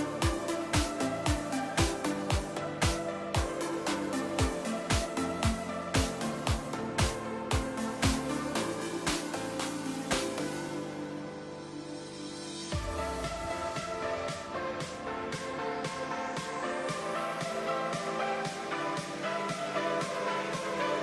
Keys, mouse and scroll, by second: 0.3 Tab, 1.5 click, 2.0 click, 2.7 click, 3.7 click, 7.2 click, 8.4 Tab, 8.6 click, 9.5 click, 10.4-10.9 middle drag, 10.9-11.3 scroll down 3, 11.3-12.4 shift+middle drag, 12.4-13.0 scroll up 4, 13.0-13.4 shift+middle drag, 13.4-13.8 scroll down 4, 13.8-17.3 middle drag, 17.3 scroll up 2, 17.6-18.6 shift+middle drag, 18.6 click, 19.5 click, 20.3-21.0 drag.